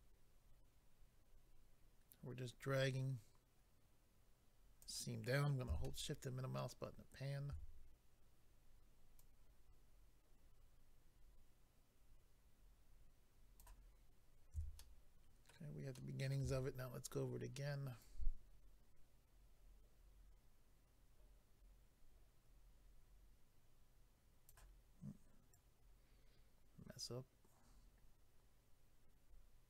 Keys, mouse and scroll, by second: 5.8 shift+middle click, 9.2 click, 14.8 shift+middle click, 15.9 shift+middle click, 18.0 click, 25.5 click.